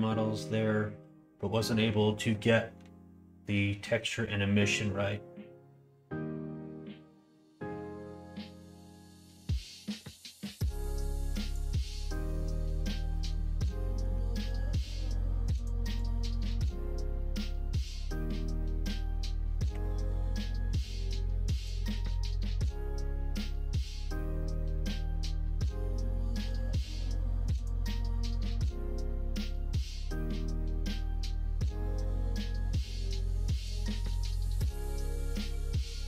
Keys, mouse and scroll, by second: 10.8 middle click, 11.5 click, 12.1 middle click, 13.1 middle click, 13.5 middle click, 13.8 middle click, 14.1 Tab, 14.4 middle click, 14.7 middle click, 16.0-17.2 drag, 19.7 o, 20.1 middle click, 21.0 middle click, 21.8 middle click, 22.4 g, 26.6 click, 27.4 middle click, 28.7 middle click, 29.3 g, 31.4 click, 32.6 g, 33.7 middle click, 34.6 middle click, 34.8 g.